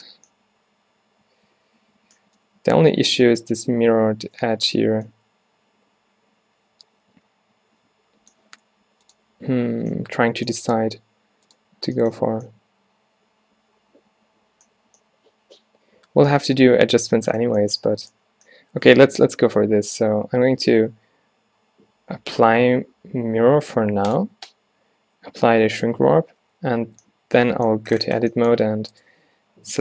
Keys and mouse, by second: 2.6 middle click, 2.8 middle click, 3.0 middle click, 4.4-5.2 middle drag, 4.7 z, 6.8 drag, 7.1-9.1 middle drag, 9.1-10.2 drag, 12.3 z, 12.9-14.6 drag, 14.6-15.1 middle drag, 14.9 z, 15.1 drag, 17.0-17.3 middle drag, 24.2 click, 26.9 Tab, 29.3 z.